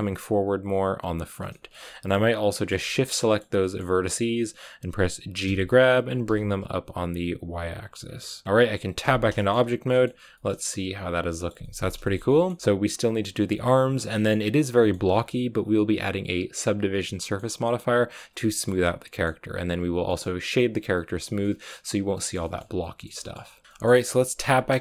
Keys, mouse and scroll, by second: 1.2 right click, 1.4 shift+middle click, 1.6-2.5 scroll up 4, 2.5 shift+right click, 2.7-5.4 middle drag, 5.4 g, 7.9-8.9 scroll down 8, 8.1 middle click, 8.9 Tab, 9.3 shift+middle click, 9.9-10.2 scroll down 2, 10.2-12.6 shift+middle drag, 12.6-13.1 scroll up 3, 13.4 shift+middle click, 14.3-14.7 scroll up 1, 14.7 shift+middle click, 15.0-17.1 scroll up 1, 17.1 scroll up 1, 17.1-18.3 middle drag, 18.3 scroll down 1, 18.5 shift+middle click, 19.3-20.0 scroll up 1, 20.0 middle click, 20.7 scroll down 1, 20.9 middle click, 21.3-21.9 scroll up 1, 21.9 scroll down 2, 22.1 shift+middle click, 23.0 scroll up 1, 23.1 shift+middle click, 23.5 scroll down 1, 23.6 shift+middle click, 24.3 Tab, 24.7-24.8 shift+middle drag.